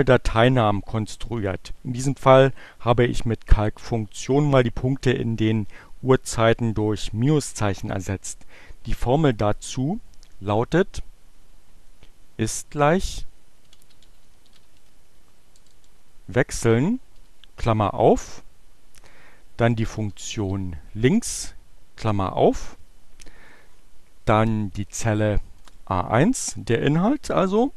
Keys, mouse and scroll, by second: 12.9-15.9 typing, 16.9 shift+8, 18.2 shift+l, 19.7-21.3 typing, 25.5 click.